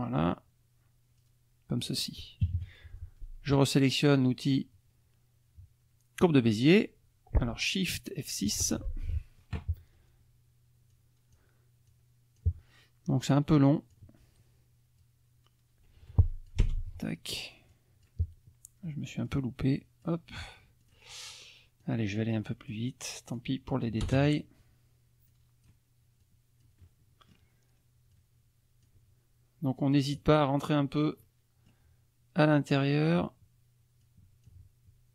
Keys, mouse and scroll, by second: 1.2 click, 2.4 KP_Subtract, 8.6 shift+F6, 9.0 shift+click, 10.9 click, 11.9 click, 13.3 click, 15.0-16.7 drag, 16.6 Return, 17.7 click, 19.3 click, 20.8 click, 21.8-22.9 drag, 23.3 click, 24.1 Return, 24.1 click, 25.3 click, 26.2-27.5 drag, 28.1 click, 30.2-31.2 drag, 31.4 click, 32.7 click, 34.0 click.